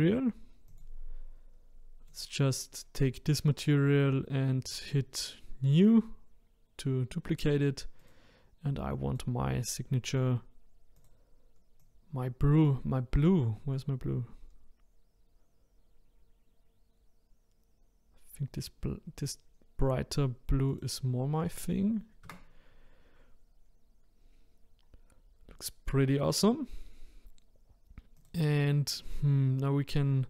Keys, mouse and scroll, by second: 0.7-3.7 drag, 5.7-8.1 drag, 11.0 click, 20.7 click, 22.2 Tab, 23.7-24.8 scroll up 2, 24.8-26.6 scroll down 1, 27.9 scroll down 1, 28.2 click.